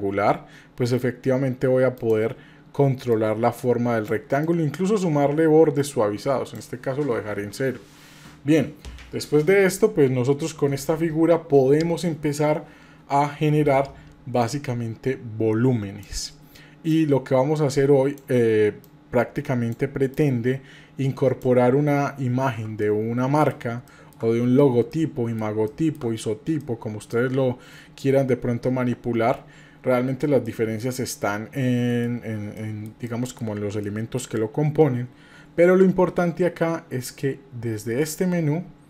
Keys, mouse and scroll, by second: 3.1 click, 4.4-6.6 drag, 14.4-16.0 drag, 16.9-18.3 drag, 18.8 click, 20.1-21.4 drag, 22.8 middle click, 23.9 shift+middle click, 24.3-24.9 scroll up 1, 24.9 middle click, 25.7 shift+middle click, 26.2-26.6 scroll up 1, 26.6 shift+middle click, 30.5 shift+middle click, 31.1 middle click, 32.6 middle click, 33.1 shift+middle click, 33.9 middle click.